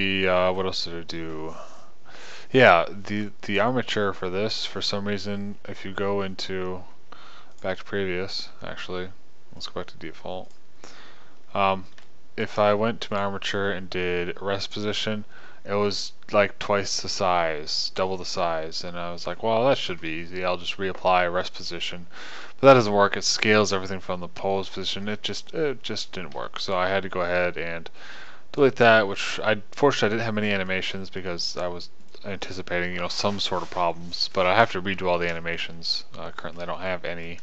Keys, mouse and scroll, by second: 23.1-24.1 middle drag, 31.8 click.